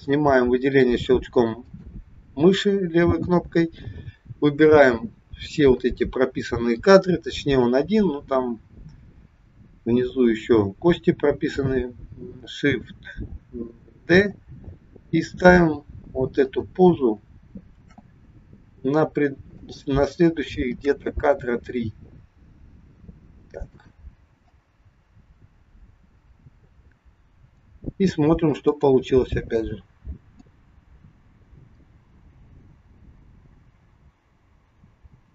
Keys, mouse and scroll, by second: 1.5 click, 14.0 shift+d, 17.9 shift+d, 20.8 shift+d, 24.7 click, 28.6 click, 30.4 click.